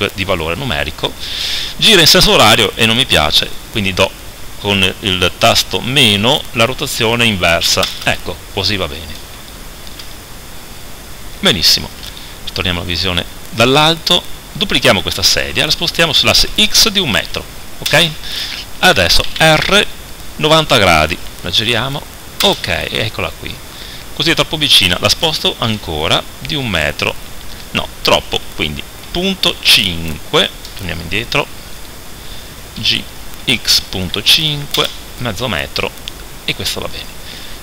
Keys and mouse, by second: 9.6 middle click, 10.6 middle click, 12.0 KP_7, 15.4 shift+d, 19.3 r, 25.4 g, 31.9-34.8 right drag, 32.8 g.